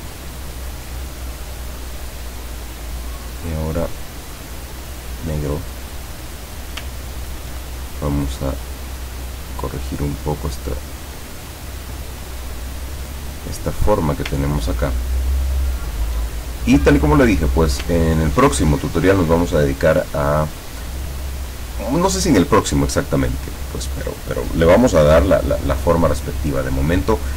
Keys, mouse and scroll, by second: 2.9 click, 5.1 click, 7.1 ctrl+scroll up 2, 8.4 click, 9.5-13.0 drag, 15.2 ctrl+scroll down 2, 16.5 ctrl+click, 16.8 middle click, 18.0 ctrl+scroll down 2.